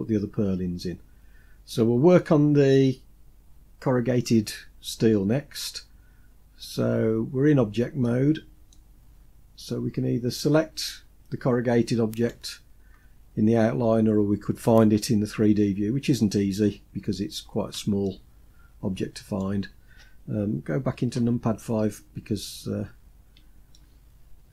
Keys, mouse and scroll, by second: 0.6-1.5 shift+middle drag, 2.0 scroll up 4, 7.4-7.8 scroll down 2, 7.8 middle click, 8.7-10.5 scroll down 3, 12.0 click, 17.8-19.2 shift+middle drag, 20.9 KP_5, 22.2-22.8 scroll up 5, 23.5 shift+middle click.